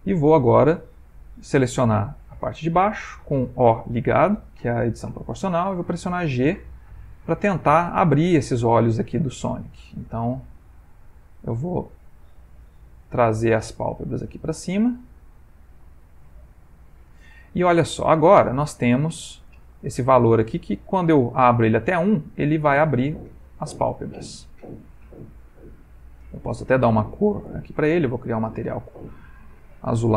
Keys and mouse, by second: 5.7 g, 9.5 alt+click, 10.2 g, 12.7 alt+click, 13.3 g, 15.4 g, 16.5 Tab, 19.4 click, 21.2 click, 27.4 click, 28.2 click, 29.3 click.